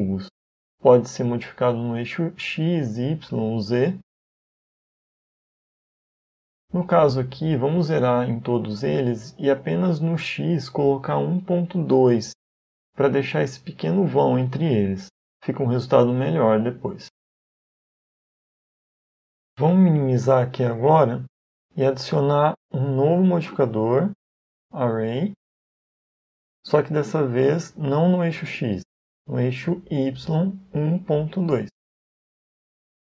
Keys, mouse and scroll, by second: 2.7 click, 5.9 click, 7.0 click, 13.2 middle click, 22.8 click, 23.5 click, 28.0 click, 30.1 click.